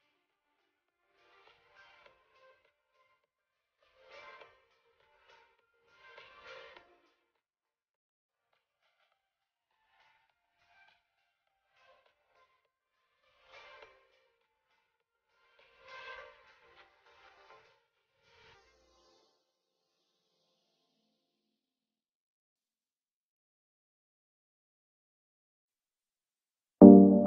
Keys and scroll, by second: 9.8 shift+Up, 11.4 shift+Right, 16.2 shift+space, 18.7 shift+space, 23.6 ctrl+z, 24.7 shift+Down.